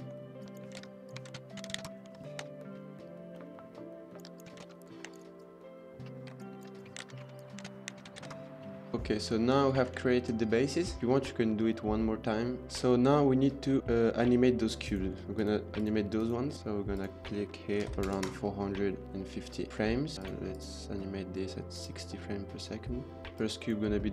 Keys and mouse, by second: 0.4 click, 0.5 Tab, 0.7-2.4 typing, 0.8 Tab, 1.0 click, 1.8 KP_Enter, 4.1 click, 4.2 Tab, 4.3 click, 4.6 shift+s, 4.7 Tab, 5.0 shift+d, 6.3-8.2 typing, 6.6 Tab, 6.7 click, 7.1 Tab, 7.2 shift+middle click, 7.3 click, 8.3 KP_Enter, 8.7 middle click, 9.2 middle drag, 9.9-10.8 shift+middle drag, 12.6-13.2 middle drag, 14.7 click, 15.1 shift+click, 15.6 shift+click, 16.0 shift+click, 16.9-18.2 drag, 18.2-19.2 middle drag, 19.3-19.7 middle drag, 19.8 shift+middle drag, 20.1 click, 20.4-20.9 drag, 24.0 click.